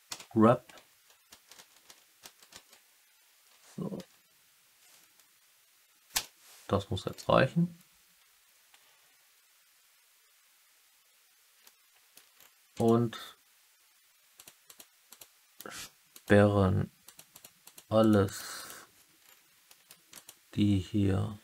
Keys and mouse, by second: 0.0 g, 0.8 Down, 1.3 Up, 1.5 Up, 1.8 Up, 2.2 Up, 2.5 Up, 3.3 Down, 3.5 Down, 6.0 Return, 11.6-12.1 alt+middle drag, 12.4-12.7 middle drag, 12.7 click, 14.3 click, 14.6 click, 15.0 click, 16.1 click, 17.0 click, 17.2 click, 17.6 click, 17.9 click, 18.2 click, 18.5 click, 19.6 middle drag, 20.1 click.